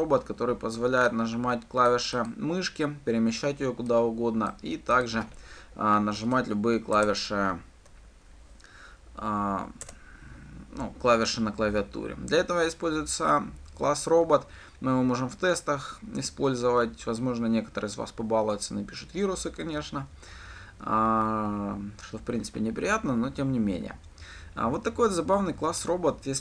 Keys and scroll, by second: 6.8 alt+Return.